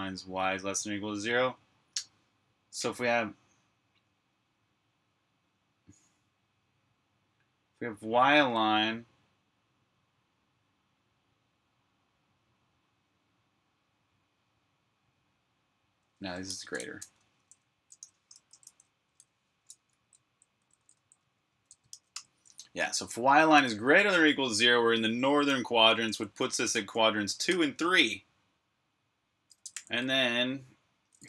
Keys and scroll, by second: 15.9-18.7 typing, 19.7 Escape, 19.8-22.5 typing, 25.5-27.4 typing, 29.5 Escape.